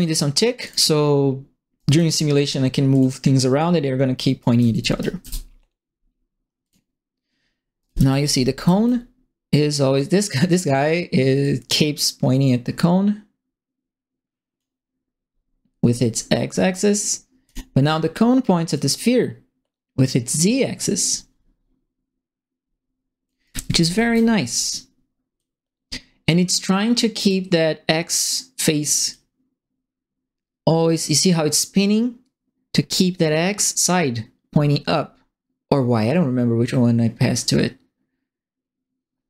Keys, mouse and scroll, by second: 0.6 click, 1.7 right click, 2.9 click, 4.3-5.4 typing, 4.4 right click, 6.6 click, 7.7-8.8 typing, 7.8-8.8 right drag, 10.1 right click, 11.4-14.5 drag, 17.4 click, 18.7-23.2 drag, 23.2-24.4 typing, 23.4 right click, 23.9 click, 25.3-27.2 drag, 29.1-39.2 drag.